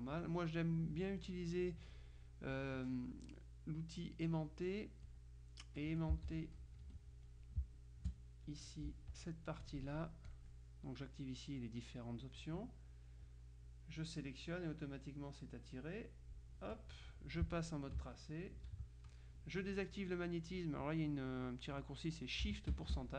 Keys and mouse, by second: 2.0 click, 4.6-5.7 drag, 6.2 z, 6.3 click, 6.9 F2, 7.3 click, 7.7 space, 8.5 click, 9.7-10.9 drag, 14.3-16.7 drag, 18.3 ctrl+KP_5.